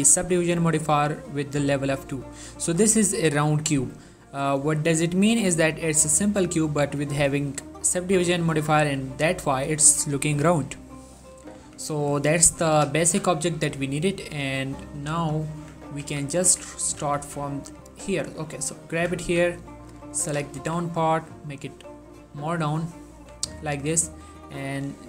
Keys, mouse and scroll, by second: 3.1-3.4 shift+middle drag, 4.0-4.9 middle drag, 7.4 right click, 8.0 click, 8.6 middle click, 8.9 1, 11.7 z, 12.5 shift+middle click, 12.8 g, 13.1 z, 14.3 click, 15.1 z, 15.7 Tab, 16.2 z, 16.6 Tab, 17.0 g, 17.3 z, 18.4 click, 19.1 Tab, 19.3 z, 19.7 click, 20.4 g, 20.7 z, 22.1 click, 22.4 scroll, 23.1 middle click, 23.3 1, 24.7 click.